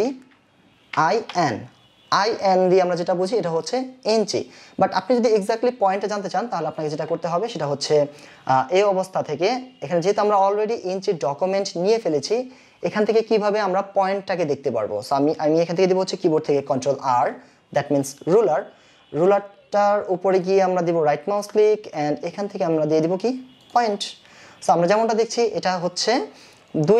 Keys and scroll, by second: 1.2 n.